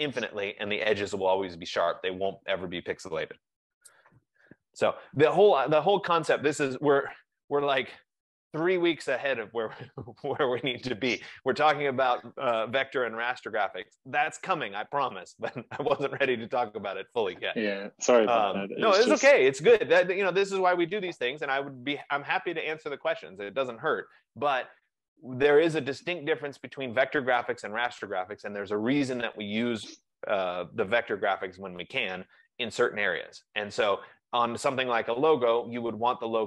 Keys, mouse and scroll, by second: 10.4 F15.